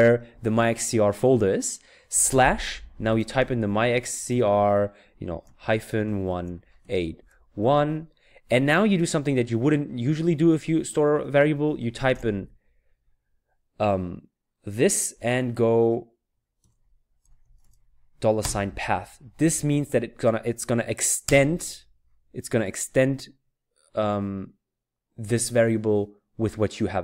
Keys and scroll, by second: 2.3-4.3 typing, 5.4-7.7 typing, 12.9 typing, 16.6-18.4 typing, 21.3 Return.